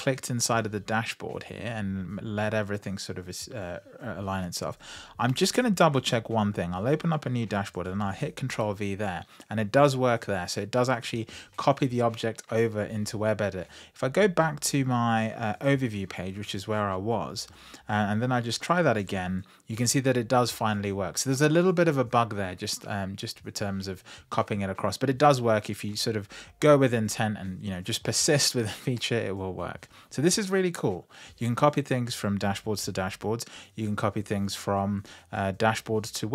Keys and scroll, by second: 7.6 super+v, 18.5 super+v.